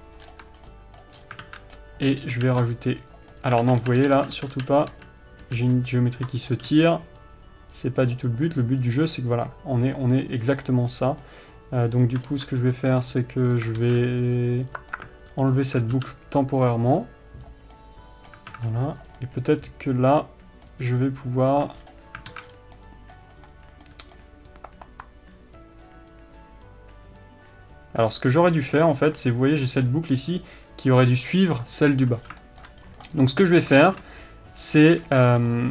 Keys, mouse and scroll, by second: 0.0 Tab, 0.2-0.6 scroll down 1, 0.7 Tab, 0.9 scroll down 1, 1.5 scroll up 1, 1.8 alt+a, 2.8 ctrl+r, 4.0 ctrl+z, 6.8 click, 7.0 g, 8.5 click, 9.5-16.0 middle drag, 11.3-11.7 scroll up 1, 12.6 ctrl+r, 14.2 alt+a, 16.0 alt+click, 17.8 x, 18.1-19.3 middle drag, 18.9 alt+a, 19.3 click, 19.5-29.0 middle drag, 22.1-23.1 scroll down 4, 22.7 alt+a, 23.9-24.2 scroll up 2, 29.0 alt+click, 32.5 scroll down 1, 32.8-35.7 shift+middle drag, 33.2-33.5 scroll up 2, 33.8-34.1 scroll down 2, 35.1-35.4 scroll up 1.